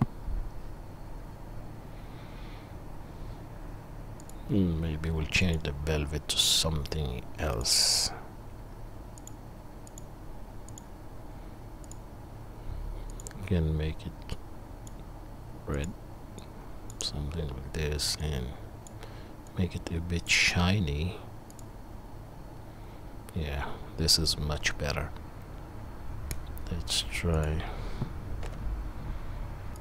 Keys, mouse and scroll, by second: 5.5 click, 5.5 middle click, 7.5 click, 7.5 middle click, 9.3-11.9 drag, 9.3-11.9 middle drag, 18.3-21.8 drag, 18.3-21.8 middle drag, 27.4 click, 27.4 middle click, 28.6 F12.